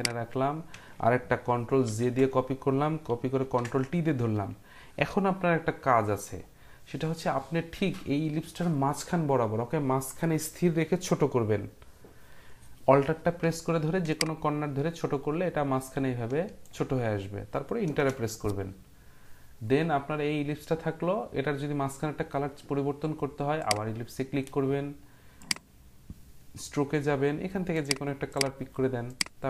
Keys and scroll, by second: 1.8 ctrl+j, 3.4 ctrl+t, 17.9 Return.